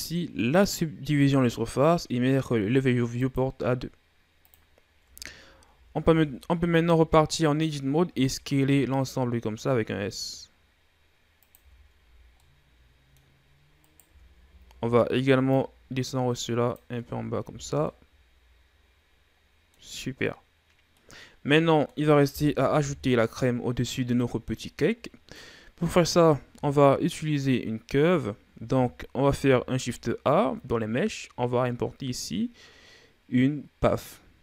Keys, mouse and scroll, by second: 3.0-4.9 drag, 4.9 Tab, 5.5 a, 5.8 a, 7.9 s, 11.4 Tab, 11.8 a, 12.0 scroll down 3, 12.2-13.3 middle drag, 13.3-13.7 scroll up 3, 13.7 right click, 13.9 Tab, 14.2 a, 14.5 a, 15.3-16.8 drag, 16.8 Tab, 17.3 a, 17.5 scroll down 2, 17.7-22.6 middle drag, 22.6 KP_1, 29.1 shift+a.